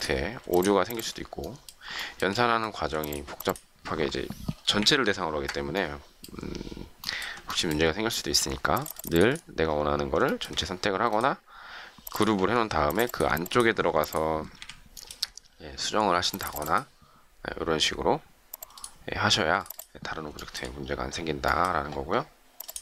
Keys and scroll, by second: 4.7 shift+Delete, 14.5 Delete.